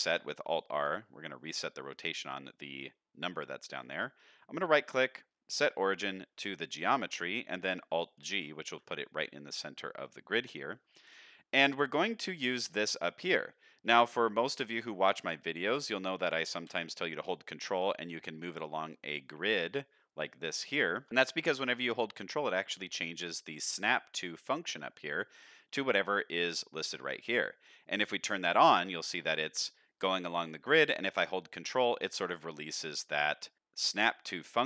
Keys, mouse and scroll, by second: 0.6 shift+middle drag, 1.6 middle drag, 3.8-6.6 right drag, 8.1 alt+g, 9.6-10.0 middle drag, 10.5 shift+middle drag, 13.6 shift+middle drag, 14.6 shift+middle drag, 15.0 click, 15.4 shift+middle drag, 15.8-16.5 scroll down 1, 16.5 g, 28.2 click, 29.2 g.